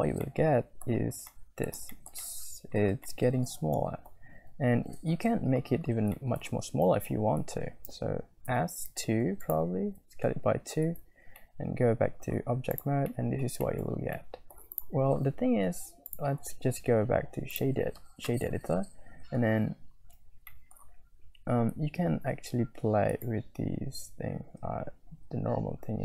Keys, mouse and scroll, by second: 0.5 click, 0.5 middle click, 0.7 click, 0.8-1.7 scroll up 3, 1.3 middle click, 1.5 click, 1.5 middle click, 1.9 shift+middle click, 2.2 middle click, 3.0-4.1 middle drag, 6.1 shift+middle click, 6.6 Tab, 8.4 Tab, 8.6 s, 10.1 Tab, 10.8 Tab, 11.6 middle click, 12.8 scroll up 1, 13.1 middle click, 13.6 shift+scroll up 2, 13.6 shift+middle click, 14.1 middle click, 14.2 click, 14.7 click, 16.2 click, 16.4-17.7 right drag, 20.5 shift+middle click, 23.2 shift+click, 24.9-26.0 shift+drag.